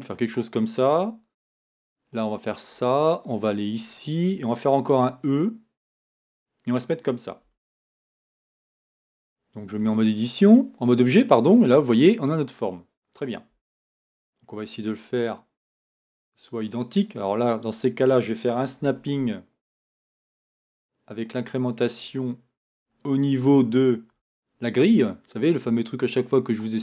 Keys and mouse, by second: 4.9 e, 7.4 r, 9.8 Tab, 13.5 Tab, 18.8 shift+Tab, 22.9-26.8 drag.